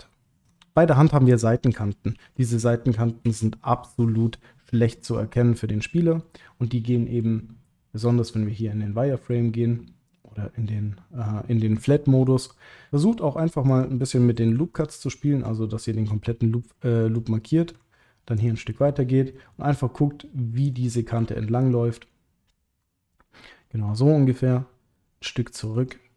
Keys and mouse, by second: 0.4 click, 2.1 shift+h, 3.2 KP_Decimal, 4.0 middle click, 4.9 click, 6.2-7.2 middle drag, 10.1 click, 13.6 click, 14.9 alt+shift+click, 15.5 middle click, 16.7 middle click, 18.4 alt+shift+click, 18.9 middle click, 19.7 middle click, 21.6 alt+shift+click, 22.1 middle click, 23.1 typing, 25.0 ctrl+middle click, 25.9 middle click.